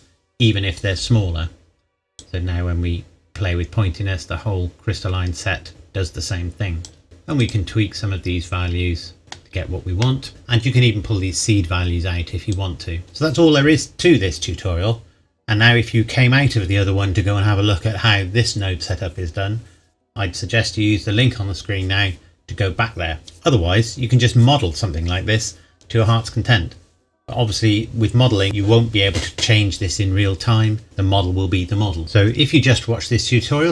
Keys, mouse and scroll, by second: 2.2 click, 7.0-7.4 scroll up 1, 7.4 click, 9.2 middle click, 9.6-10.0 scroll down 1, 10.0 middle click, 12.8 click, 28.4 middle click.